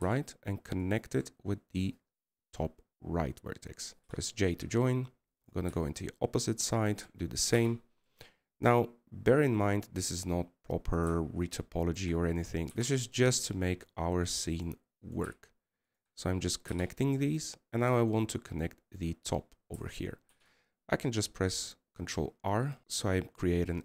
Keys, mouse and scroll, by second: 9.8 scroll up 1.